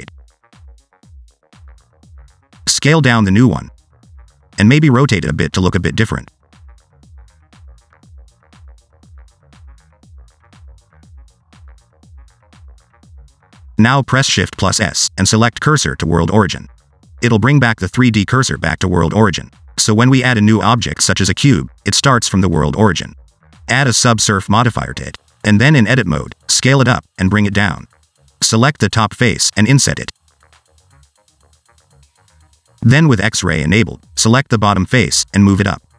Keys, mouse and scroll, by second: 1.5 shift+d, 3.3 s, 4.4 click, 4.6 scroll up 2, 4.7 shift+middle click, 5.2 r, 6.7 scroll down 2, 6.8 shift+middle click, 7.1 click, 7.2 scroll up 1, 7.3 Tab, 7.6 click, 7.8 click, 8.5 click, 8.7 click, 9.5 click, 9.8 click, 10.3 click, 10.6 click, 11.2 click, 11.3-11.7 scroll down 4, 11.7 shift+middle click, 13.5 a, 14.4 click, 15.1 shift+middle click, 16.3 shift+s, 19.2 shift+a, 23.6 ctrl+3, 24.5 Tab, 26.0-26.7 scroll down 2, 26.9 s, 27.8 click, 29.0 3, 29.2 middle click, 29.6 click, 30.2 i, 32.7 shift+middle click, 33.2 1, 34.3 alt+z, 35.0 click.